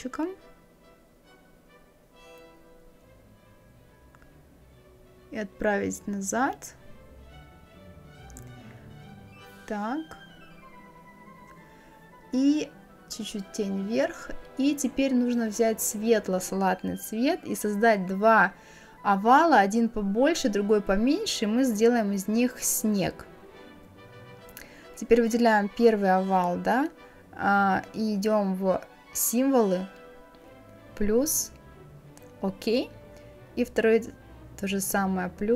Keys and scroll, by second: 11.6 Up.